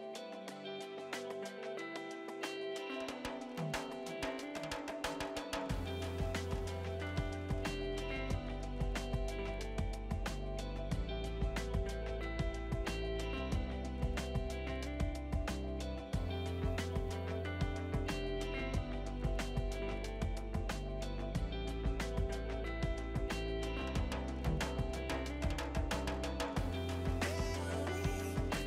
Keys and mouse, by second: 0.5 2, 0.6 Return, 3.7 click, 4.0 ctrl+shift+x, 4.1 click, 5.6 KP_1, 5.9 Return, 6.3 click, 6.5 right click, 6.9 click, 7.2 right click, 7.9 click, 10.2-14.7 typing, 10.4 ctrl+click, 11.1 Return, 11.3 click, 12.2 Return, 12.4 click, 13.2 ctrl+click, 13.6 Return, 13.8 click, 14.4 ctrl+click, 15.2 Return, 15.7 click, 19.5 Delete, 20.3 click, 23.9 Delete, 24.2 click, 25.6 click, 26.1 shift+click.